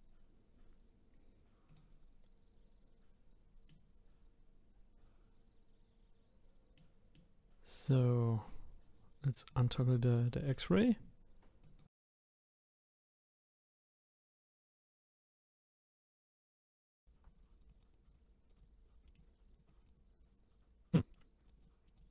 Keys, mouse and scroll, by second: 1.7 click, 3.7-6.7 middle drag, 7.1-9.5 middle drag, 9.5 click, 10.2-11.6 middle drag, 11.6 click, 11.9 click, 13.9 middle click, 14.1 click, 14.7 click, 14.9 middle click, 15.3-15.7 scroll up 2, 15.7 click, 16.3 scroll down 1, 16.4 middle click, 16.6 click, 16.9 middle click, 17.3 click, 17.8 click, 19.0 middle click, 19.5 click, 20.3 middle click, 21.2 middle click, 21.4 click, 21.7 middle click.